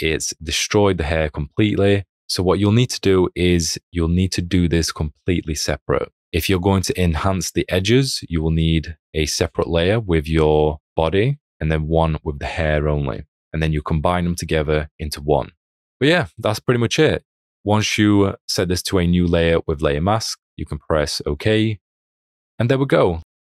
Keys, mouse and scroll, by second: 13.0 space, 13.2 click.